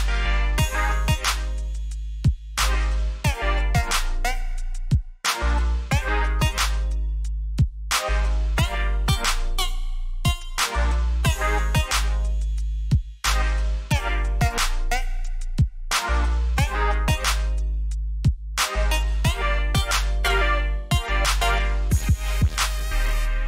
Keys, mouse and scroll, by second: 0.3-1.1 alt+scroll down 2, 1.1 click, 4.8 click, 11.4 click.